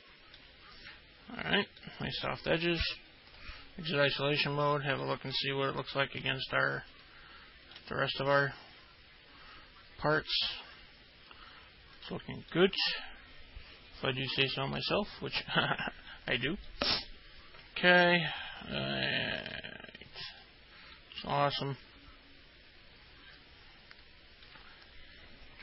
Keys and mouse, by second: 0.0 alt+middle click, 2.0 alt+middle click, 4.9 alt+middle click, 6.8 ctrl+alt+middle click, 8.5-12.1 alt+middle drag, 12.7 alt+middle click, 15.9 alt+middle click, 16.9 alt+middle click, 20.9-24.7 alt+middle drag.